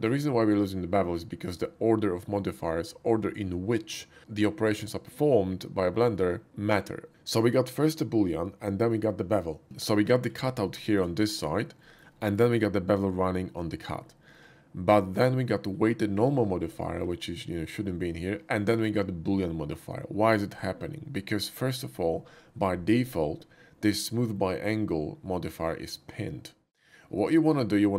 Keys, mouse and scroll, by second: 9.6 typing, 9.9-10.3 middle drag, 10.8 shift+middle drag, 11.8 shift+middle click, 12.2 shift+middle click, 14.3-15.7 shift+middle drag, 16.5 middle click, 16.9 shift+middle drag, 27.1 click.